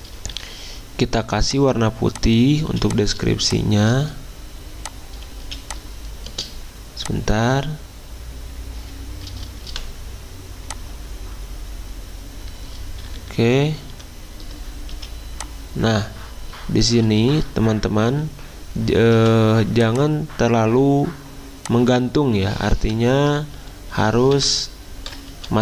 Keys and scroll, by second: 0.3 d, 2.7 z, 5.4 z, 9.7 v, 13.0 alt+Up, 13.2 alt+Up, 13.9 alt+Down, 14.9 z, 19.1 v, 24.3 ctrl+shift+Delete.